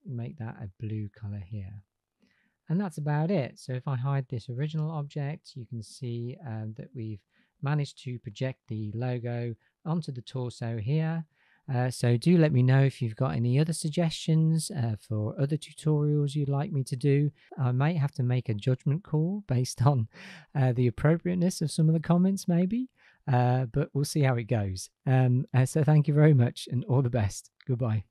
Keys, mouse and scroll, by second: 2.7 click, 3.3 click, 4.5 h, 10.1 click.